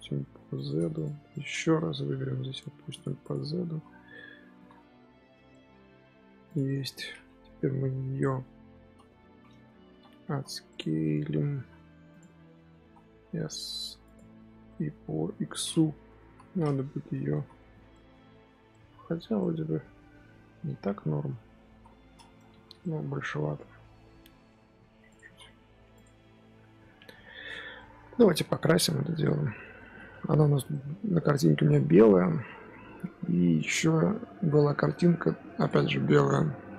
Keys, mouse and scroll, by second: 0.8 click, 1.2 click, 1.7 Tab, 2.1 g, 3.0 Tab, 3.1 click, 3.6 z, 3.8 scroll down 1, 4.0-4.5 middle drag, 4.5 z, 4.6-5.4 scroll down 2, 5.4-5.9 middle drag, 5.9-6.4 scroll up 2, 6.4 click, 6.6-6.9 middle drag, 6.9-7.5 scroll up 1, 7.5 KP_1, 8.3 KP_3, 8.9 scroll up 2, 9.2 Tab, 9.4-11.5 typing, 10.9 middle click, 12.3 middle click, 12.5 Tab, 12.7 s, 14.9 scroll down 1, 15.1-15.9 middle drag, 15.9 KP_3, 16.1 KP_1, 17.0 Tab, 17.2 z, 17.5 shift+middle click, 18.1 Tab, 18.3 z, 18.6-21.3 middle drag, 21.3 KP_3, 21.6 KP_1, 21.9-22.3 scroll up 3, 22.3 Tab, 22.4 z, 22.7-23.7 shift+middle drag, 23.7 Tab, 24.0 s, 25.2 z, 25.4-25.8 middle drag, 25.8 click, 26.1 scroll down 1, 26.4-26.9 middle drag, 26.9 z, 27.4 z, 27.7-30.8 middle drag.